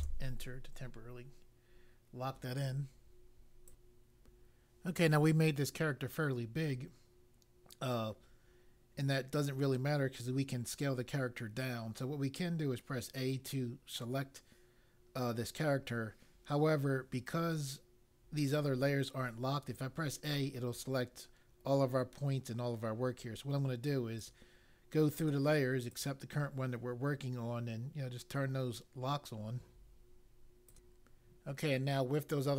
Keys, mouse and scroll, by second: 3.6 click, 24.2 click, 25.8 click, 30.6 click.